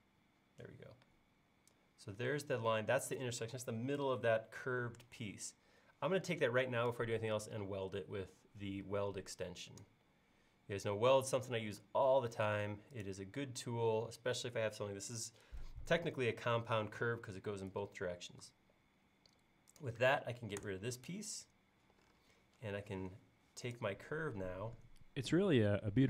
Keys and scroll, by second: 20.7 BackSpace.